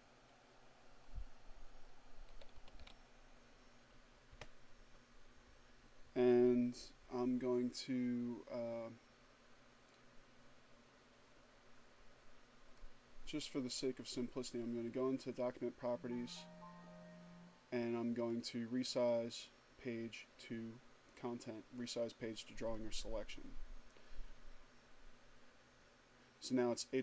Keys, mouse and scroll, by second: 1.8-3.0 typing, 4.0 Return, 12.6 click, 14.1 click, 17.8 click, 22.5 click.